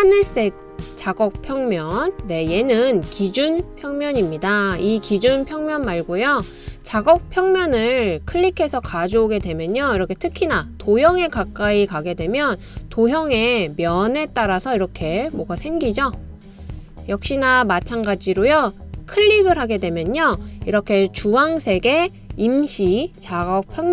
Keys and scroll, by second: 0.0-4.7 typing, 21.1 typing.